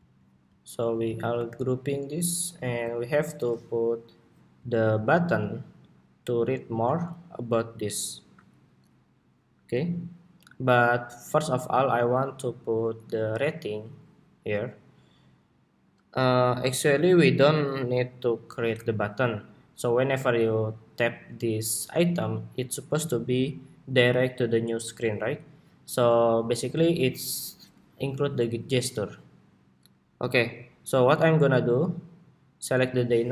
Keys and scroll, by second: 1.1 super+g, 2.5 super+s, 33.0 super+d.